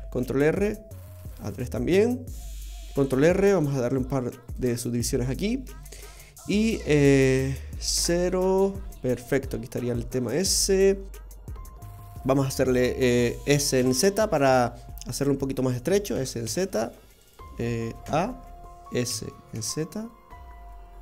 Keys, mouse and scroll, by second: 0.2 ctrl+r, 3.1 ctrl+r, 6.1 middle click, 6.2 middle click, 7.9 KP_0, 13.5 s, 16.1 s, 18.0 a, 19.0 s.